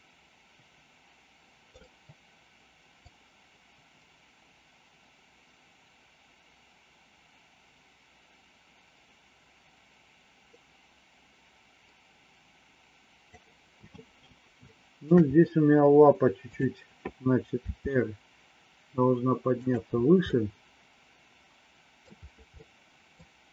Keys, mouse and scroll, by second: 3.1-13.3 drag, 14.6 shift+middle click, 16.4 click, 17.5 r, 20.2-22.0 middle drag, 22.5 middle click.